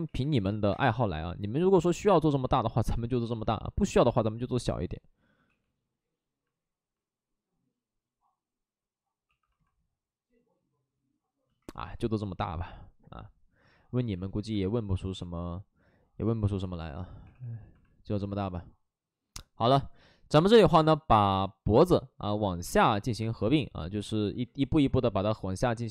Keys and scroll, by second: 0.0 ctrl+z, 0.2 3, 0.7 space, 2.4 ctrl+z, 5.4 w, 9.2 2, 14.3 2, 17.3 2, 24.7 w.